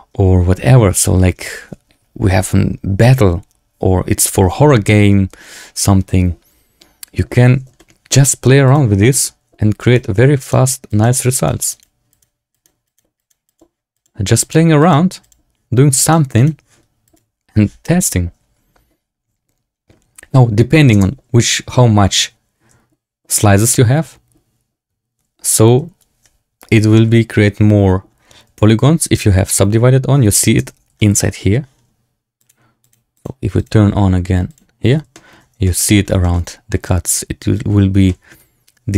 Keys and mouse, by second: 7.7 shift+click, 8.8 click, 9.0 shift+click, 9.7 click, 10.3 click, 10.8 click, 11.3 click, 11.6 click, 12.0 click, 12.4 click, 12.8 click, 13.1 click, 13.4 click, 13.9 click, 14.3 click, 14.7 click, 15.1 click, 15.9 click, 16.3 click, 20.3-20.8 drag, 20.8 space, 30.6 space, 30.9 shift+middle drag, 32.5 click, 33.1 click, 33.6-34.8 drag, 35.1 shift+click, 35.1 shift+middle drag, 35.5 shift+middle drag, 35.7 click, 36.1 shift+drag, 38.0 shift+middle drag.